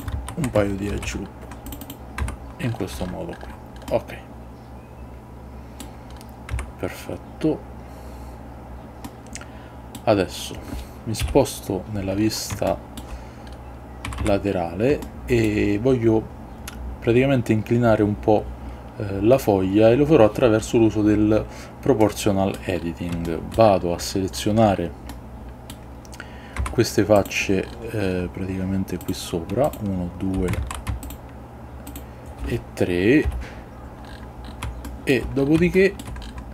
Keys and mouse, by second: 0.0 click, 0.2 ctrl+z, 1.0 ctrl+r, 2.0 click, 2.3 Tab, 4.0-5.9 middle drag, 6.7 Tab, 9.2 middle click, 11.3 KP_3, 12.8 shift+middle click, 14.2 a, 14.3 a, 15.1 shift+middle click, 22.1 middle click, 23.4-25.8 shift+middle drag, 26.7 Tab, 29.1 click, 30.7 ctrl+z, 33.4 KP_3, 35.0 shift+middle click, 35.8 shift+middle click.